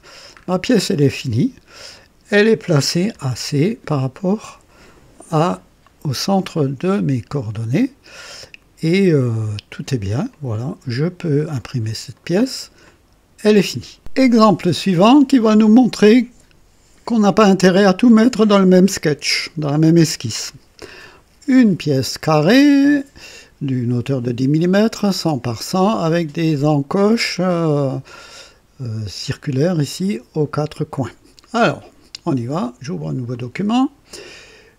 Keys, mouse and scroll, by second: 0.0 scroll down 1, 0.7-1.9 drag, 1.1 typing, 2.1 click, 2.9-4.7 typing, 3.9-6.7 drag, 7.3-10.1 drag, 10.3-12.1 drag, 12.2 right click, 12.9-13.8 drag, 33.3 click.